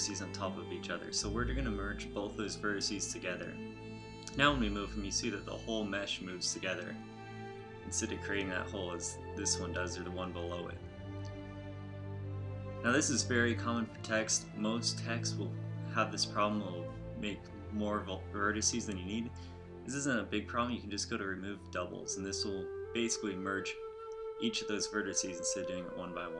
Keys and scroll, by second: 2.3 a, 3.7 g, 9.0 g, 11.6 g, 13.7 a, 20.8 a, 22.6 ctrl+alt+shift+m.